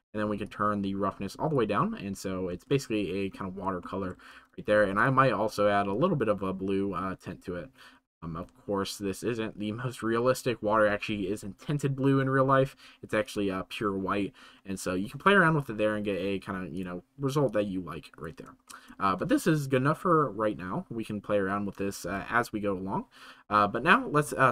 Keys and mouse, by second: 0.4-1.5 drag, 3.8 shift+middle click, 13.2 click, 18.8 shift+middle click.